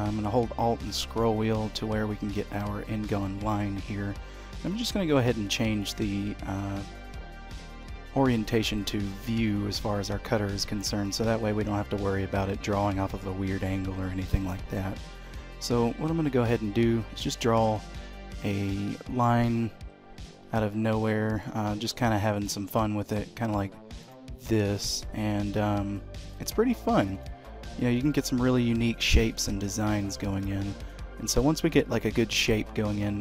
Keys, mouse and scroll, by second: 0.4-1.0 alt+scroll down 1, 1.0-2.0 alt+scroll down 2, 4.6 d, 15.3 click, 21.4 click.